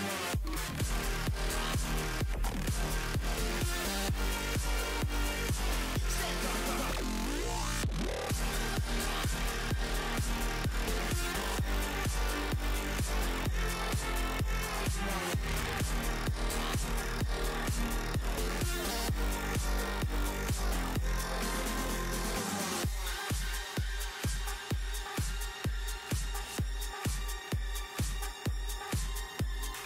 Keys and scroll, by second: 1.9 s, 2.9 s, 21.4 s, 28.8 s, 29.2 s.